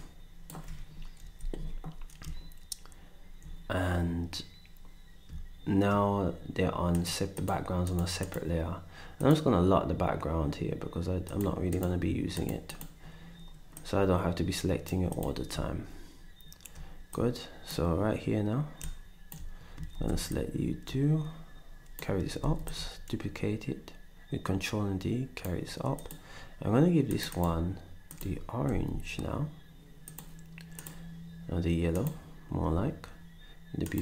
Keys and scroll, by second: 1.2 ctrl+Delete, 19.9 ctrl+shift+d, 22.4 d, 28.6 d.